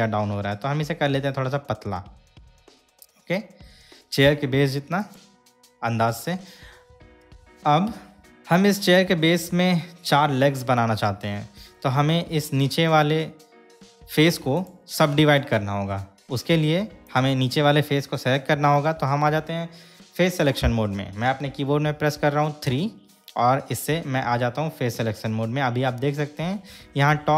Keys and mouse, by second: 5.2 click, 8.3-10.3 middle drag, 12.4 middle click, 13.4-14.5 shift+middle drag, 14.6 click, 17.2 click, 22.9 3.